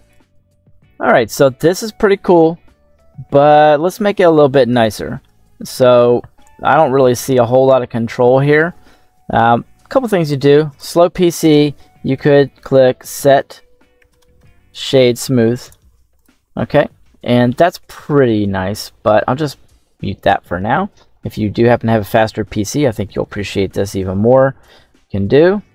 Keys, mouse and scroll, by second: 0.0 middle click, 0.0-0.6 scroll up 2, 1.2-1.9 middle drag, 2.5 KP_7, 3.1 scroll down 2, 4.7-5.1 shift+middle drag, 5.5 scroll up 2, 6.9-8.2 middle drag, 8.8-9.9 scroll down 1, 10.0 middle click, 10.6 right click, 11.3 space, 17.1 scroll up 1, 18.9 right click, 19.8 m, 20.4-21.7 scroll down 1, 21.7 KP_7, 22.4-22.8 scroll down 2, 22.8 middle click, 24.5-25.7 drag.